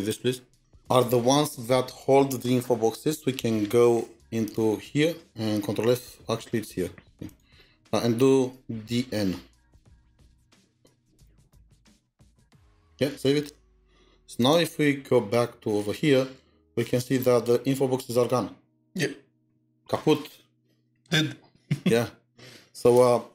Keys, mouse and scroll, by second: 0.6 typing, 6.4 typing, 7.4-9.4 scroll, 9.8 typing, 10.4 Return, 11.4-13.7 typing, 12.4 Tab, 15.7 scroll, 15.7-16.3 scroll down 3, 16.3 scroll up 2, 16.8-17.3 scroll down 2.